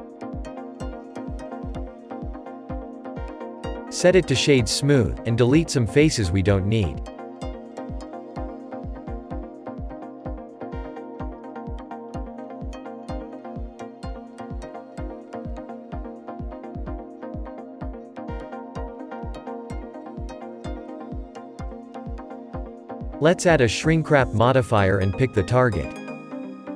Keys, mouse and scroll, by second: 1.6 Tab, 2.2 scroll down 2, 2.6-3.4 shift+middle drag, 3.4-4.7 scroll up 4, 4.7-5.0 right drag, 5.0 middle drag, 5.3 scroll down 2, 7.5-8.9 shift+middle drag, 8.9 Tab, 9.4 middle click, 9.8-10.7 scroll up 1, 11.8 click, 15.0 x, 16.6 click, 17.8 x, 18.9 middle click, 19.3 scroll down 1, 20.0-20.3 scroll down 2, 20.6 shift+middle click, 21.5 Tab, 21.9 scroll up 2.